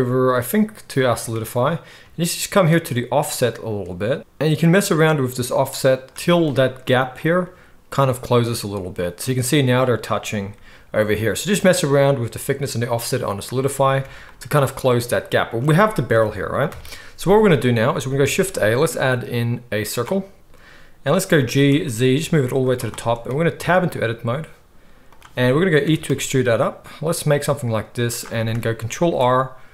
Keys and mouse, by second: 1.0-8.9 drag, 1.0-8.9 right drag, 10.5-15.4 drag, 10.5-15.4 right drag, 14.0 alt+a, 16.7 KP_1, 18.2 shift+a, 21.4 g, 22.7-25.1 shift+right drag, 23.5 Tab, 25.1-28.2 middle drag, 25.8 e, 28.2-29.7 shift+right drag, 29.0 ctrl+r.